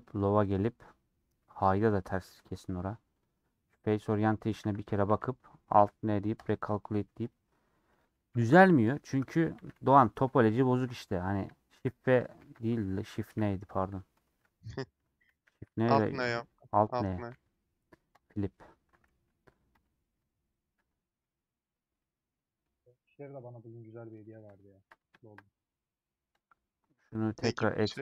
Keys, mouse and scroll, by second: 0.0-3.9 middle drag, 3.9 click, 4.4 middle click, 4.6 a, 7.2 click, 8.8 /, 9.3 Tab, 10.8 middle click, 11.8 shift+f, 13.3 shift+n, 13.9 middle click, 14.4 3, 15.4 shift+n, 16.4 n, 18.6 middle click, 19.5 click, 20.2 /, 21.0 middle click, 21.6 click, 21.9 middle click, 22.7-23.1 scroll up 3, 23.1 scroll down 1, 23.3 middle click, 24.3 a, 25.3 ctrl+shift+e.